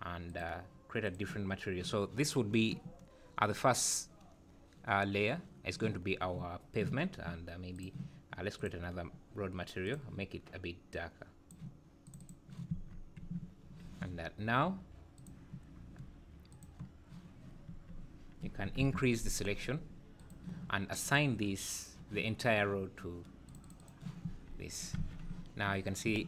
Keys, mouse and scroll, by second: 0.3 click, 1.0 click, 7.7 click, 8.5 click, 9.8 click, 12.2 click, 12.7 Tab, 13.4 `, 15.1 click, 16.5 click, 17.7 Tab, 18.8 ctrl+KP_Add, 20.1 click, 21.0-23.8 click, 23.4 click, 23.6 click, 24.2 Tab, 25.0 alt+a, 25.3 `, 26.0 `.